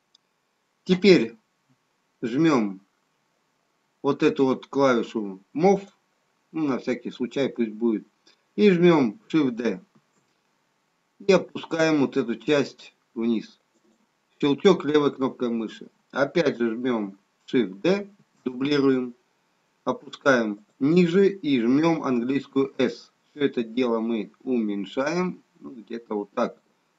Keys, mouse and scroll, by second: 5.7 click, 9.9 shift+d, 18.1 shift+d, 22.4 s.